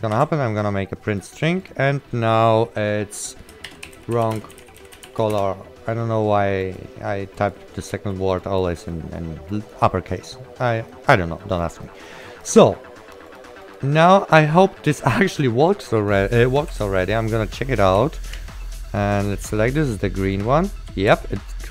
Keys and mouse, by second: 0.2 ctrl+w, 0.7 click, 3.6-5.7 typing, 6.7 click, 6.7 right click, 7.4 click, 8.4 right click, 8.5 click, 9.6 click, 9.8 right click, 12.4 click, 12.4 right click, 13.4 click, 17.0 alt+p, 18.1 right click, 18.1 w, 19.3-21.7 typing, 20.5 click.